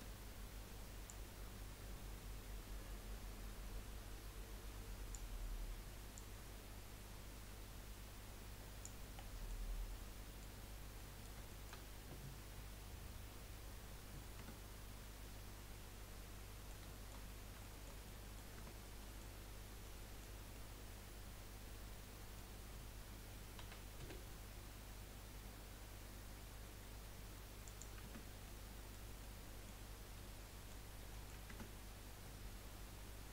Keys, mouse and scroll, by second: 0.3-1.1 scroll up 1, 1.1-2.6 drag, 6.1 click, 9.1 middle click, 9.8 scroll down 3, 10.0-14.4 middle drag, 14.4 Tab, 16.1 middle click, 17.6 shift+middle click, 18.6 Tab, 18.9-19.7 scroll up 2, 19.1 middle click, 19.9-23.7 middle drag, 23.7 s, 28.2 Tab, 28.6 middle click, 29.2-29.9 middle drag, 29.9 scroll down 3, 30.1-30.9 middle drag, 30.9 scroll up 1, 31.1-31.5 middle drag, 31.5 Tab.